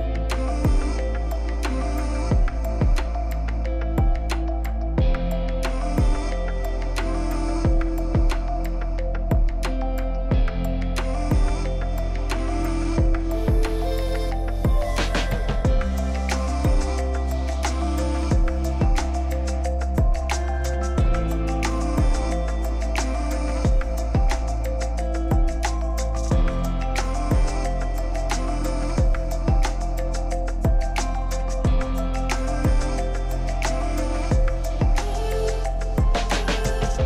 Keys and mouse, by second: 0.1 click, 0.9 click, 4.3 x, 6.3 Tab, 9.3 Tab, 12.1 c, 13.4 x, 15.0 Tab, 17.1 w, 21.3 KP_Divide, 24.7 s, 26.9-30.1 typing, 28.9 middle drag, 31.5-34.6 typing, 35.8-36.6 typing.